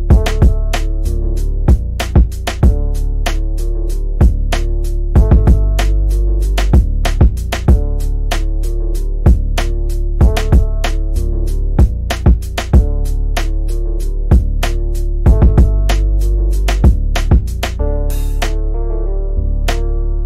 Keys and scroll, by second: 6.4 c, 7.2 F3, 7.6 Escape, 9.4 ctrl+z.